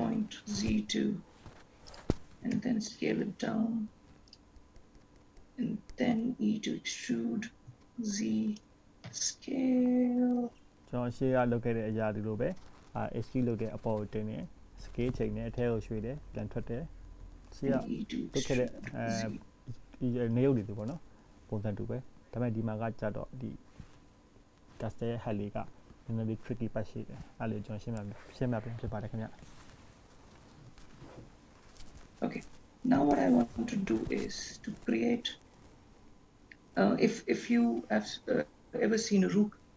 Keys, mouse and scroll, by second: 2.6 s, 6.3 e, 9.3 s, 15.0-15.6 scroll down 2, 15.9 shift+middle click, 17.7 e, 21.6-22.6 scroll up 3, 22.6 scroll down 2, 23.6-25.2 scroll down 8, 25.1 scroll up 1, 26.0 ctrl+s, 28.4-28.8 scroll up 5, 30.8-31.4 scroll down 1, 31.4 middle click, 32.9 scroll up 1, 33.5-34.0 scroll up 1, 35.4-36.5 scroll down 1.